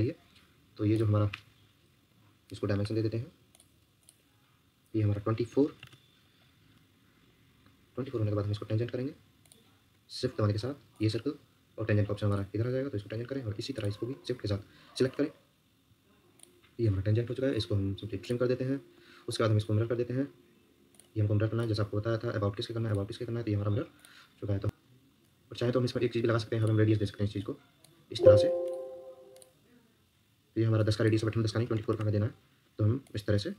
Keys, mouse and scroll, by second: 5.2-6.1 typing, 8.0 Escape, 8.2 Escape, 10.9 shift+click, 13.1 Escape, 14.1 Escape, 15.0 shift+click, 17.2 Escape, 24.6 Escape, 26.4 Escape, 31.4-32.2 typing.